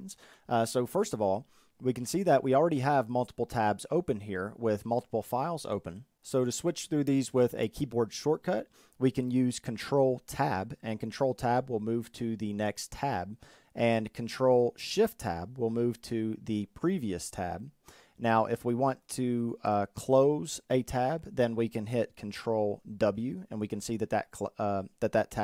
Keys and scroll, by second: 9.9 ctrl+Tab, 14.3 ctrl+shift+Tab, 22.1 ctrl+w.